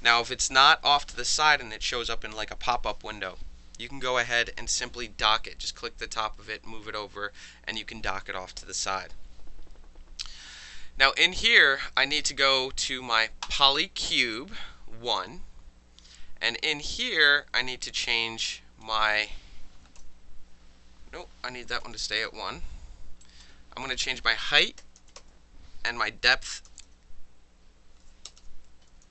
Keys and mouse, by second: 13.4 click, 18.5 click, 19.7 KP_2, 20.0 KP_Enter, 20.0 KP_0, 21.7 KP_2, 21.8 KP_Enter, 23.2 click, 24.8 KP_2, 25.2 KP_Enter, 26.4 Tab, 26.7 KP_0, 28.3 BackSpace, 28.9 KP_1.